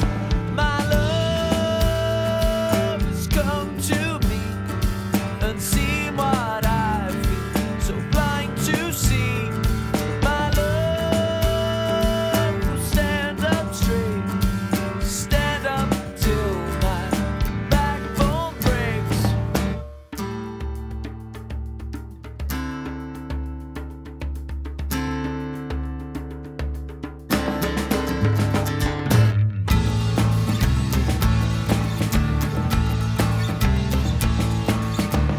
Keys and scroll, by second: 1.8 alt+c.